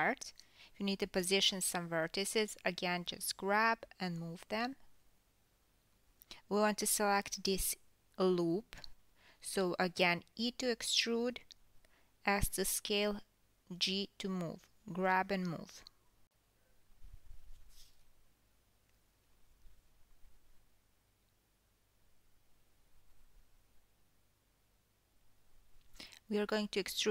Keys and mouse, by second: 1.0 g, 2.4 g, 3.6 click, 4.7 ctrl+z, 5.1 ctrl+z, 5.9 alt+drag, 9.7-16.5 drag, 10.9 KP_3, 14.1 e, 16.5-22.7 middle drag, 17.7-22.5 typing, 18.9 ctrl+z, 20.7-21.3 drag, 22.0-22.5 drag, 22.7 click, 23.3 middle click, 23.9-24.5 drag, 24.5 ctrl+middle click, 25.2 alt+click, 25.6-27.1 middle drag, 25.9 KP_3, 27.0 click.